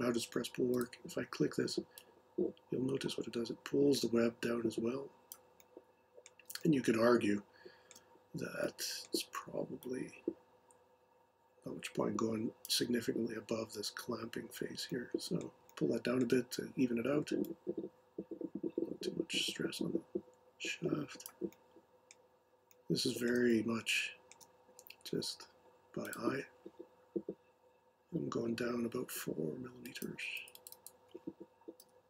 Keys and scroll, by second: 31.8-32.0 typing.